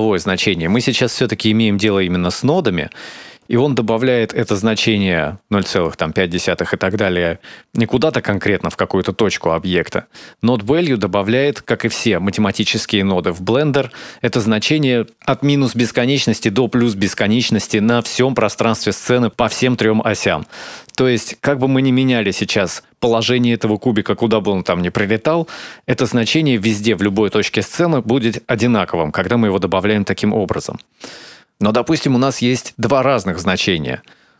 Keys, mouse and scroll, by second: 5.8 click, 32.7 click.